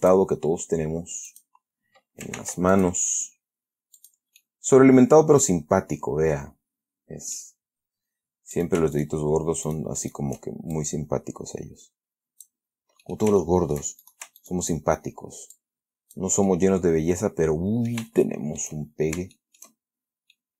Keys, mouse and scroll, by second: 0.3 ctrl+click, 1.6 click, 2.7 ctrl+r, 3.0 ctrl+click, 4.3 click, 4.6-7.9 middle drag, 8.9 shift+right click, 9.3 shift+right click, 10.0 shift+right click, 10.3 shift+right click, 11.1-13.0 shift+drag, 13.3 shift+middle click, 14.1 shift+middle click, 14.3 shift+right click, 14.7 shift+right click, 15.9 click, 16.8-18.4 middle drag, 18.5 shift+middle click, 19.1-19.5 shift+scroll up 1, 19.7 shift+middle click, 20.3-20.5 shift+scroll down 2.